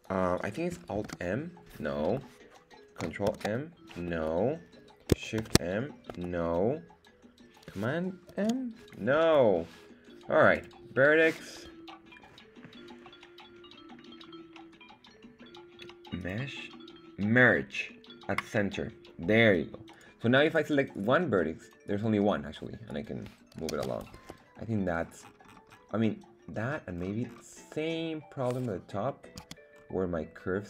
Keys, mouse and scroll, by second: 0.9 alt+m, 3.3 ctrl+m, 4.1 Escape, 5.4 shift+m, 6.1 Escape, 8.3 super+m, 10.5-14.0 drag, 16.2-18.6 drag, 19.9 right click, 20.4 right click, 20.9 right click, 21.8-22.9 right drag, 23.7 super+z, 24.1 Escape, 24.6 scroll down 2, 25.2-26.2 scroll down 7, 26.0 middle click, 27.0-28.0 scroll up 2, 28.0 scroll down 1, 28.1-28.4 scroll down 1, 28.4 middle click, 29.1 middle click, 29.4 z, 29.7-30.2 scroll up 1, 30.3-30.6 scroll down 2.